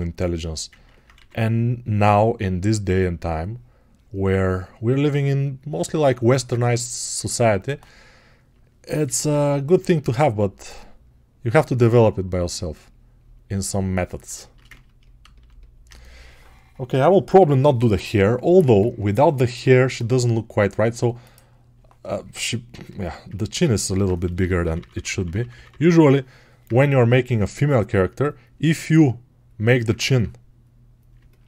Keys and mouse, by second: 7.6-13.5 ctrl+alt+right drag, 22.7-26.6 ctrl+right drag, 22.9 ctrl+Tab, 26.6-31.4 alt+drag.